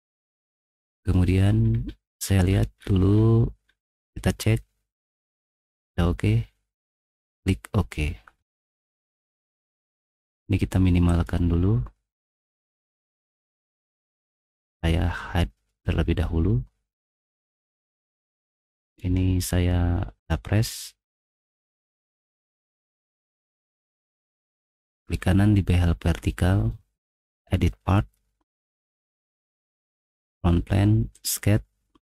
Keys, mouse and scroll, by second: 0.7 middle click, 1.7 middle click, 2.2 middle click, 3.1 middle click, 3.6 middle click, 8.3 middle click, 8.3-8.8 scroll, 8.6 middle click, 12.4 right click, 17.9 middle click, 18.8 click, 21.6 ctrl+7, 22.5 ctrl+1, 23.1 ctrl+1, 24.0 click, 25.1 click, 28.1 click, 28.9 click, 30.2 click, 31.1 click.